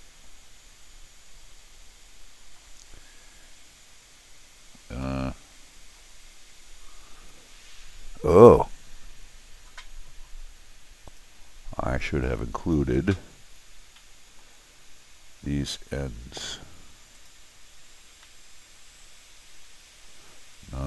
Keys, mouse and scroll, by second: 2.9 scroll up 1, 3.7 scroll up 1, 3.8 middle click, 5.0 middle click, 11.1 click, 12.2 click, 14.0 middle click, 17.1 click, 18.3 middle click, 18.9-20.0 middle drag.